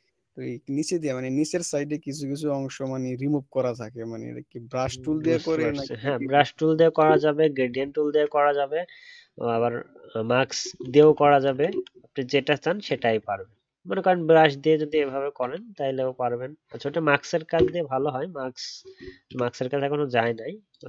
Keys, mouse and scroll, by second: 5.0 ctrl+d.